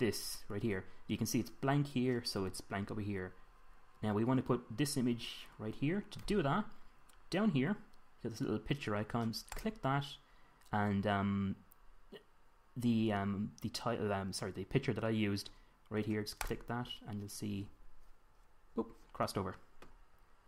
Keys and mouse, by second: 19.5-20.4 middle drag.